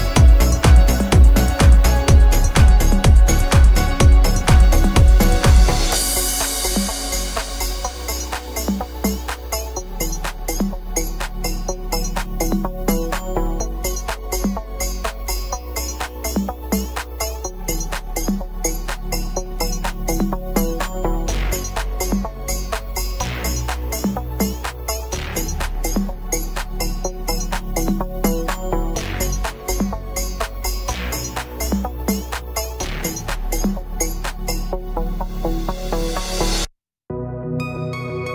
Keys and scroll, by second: 20.4 v, 28.5 v.